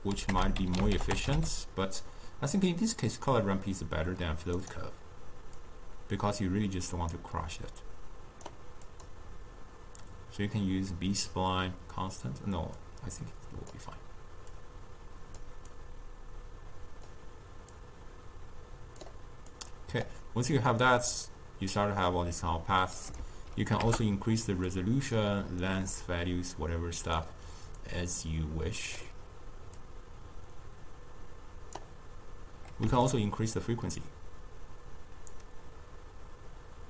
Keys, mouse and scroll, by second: 5.7-8.8 drag, 9.0-12.2 drag, 12.9-19.7 drag, 20.8-24.9 drag, 25.7-32.9 drag, 33.2-36.2 shift+drag.